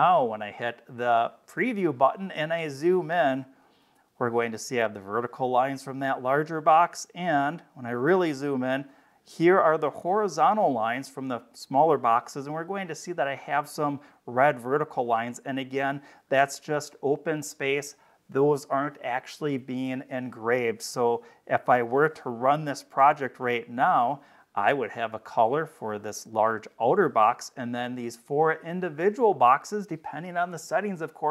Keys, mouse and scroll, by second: 1.3 click, 2.5-3.5 scroll up 6, 4.0 scroll up 2, 6.5-8.1 scroll up 7, 14.6-15.6 scroll down 3, 16.1 scroll down 2, 20.8-21.6 scroll down 2, 22.8 click.